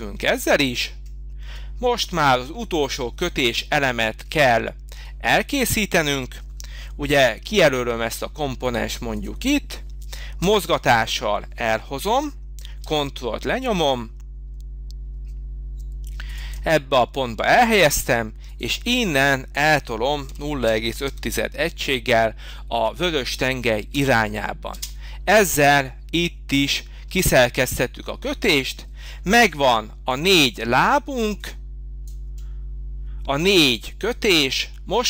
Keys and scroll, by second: 10.4 m, 20.0-21.5 typing, 23.9 Return, 24.7 space, 25.8 space, 29.2 h.